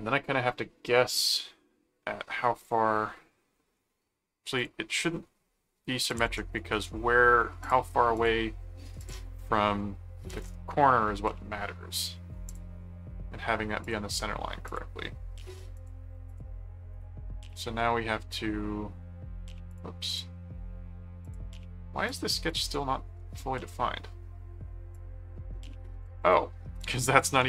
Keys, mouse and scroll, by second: 2.6 click, 4.5 click, 6.0 click, 6.6 right click, 7.6 click, 9.0 click, 12.5 click, 13.8 click, 14.7 click, 15.7 click, 16.9 right click, 17.5 ctrl+click, 18.3 ctrl+1, 19.7 click, 21.2 click, 22.1 click, 23.0 ctrl+4, 24.9 click, 26.2 click, 26.8 click.